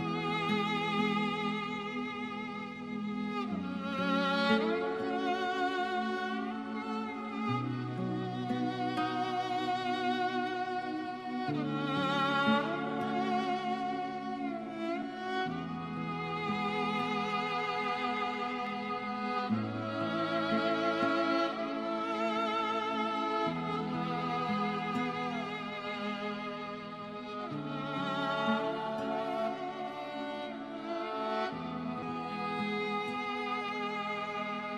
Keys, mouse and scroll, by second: 0.5 KP_Subtract, 3.3 KP_8, 3.9 KP_Enter, 6.1 click, 6.7 alt+middle click, 7.6-8.2 scroll up 1, 8.2 right click, 10.3 click, 12.9 KP_Subtract, 13.3 KP_2, 13.6 KP_Enter, 15.4 click, 16.1-18.2 scroll up 1, 19.2 Escape, 20.3 click, 22.7 scroll down 1, 23.2 alt+middle click, 25.1 right click, 26.8 click, 27.8-28.3 scroll up 1, 30.0 click.